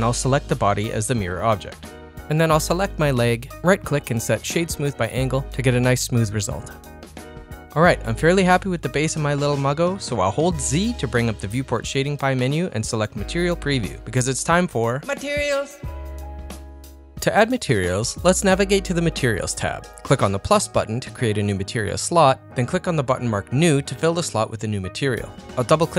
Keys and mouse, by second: 0.2-2.1 drag, 2.4 click, 4.0 right click, 5.0-7.5 middle drag, 7.9 click, 9.2 z, 16.6 middle click, 16.6 z, 17.6 middle click, 20.9-24.5 drag, 25.2 click, 25.4-25.9 drag.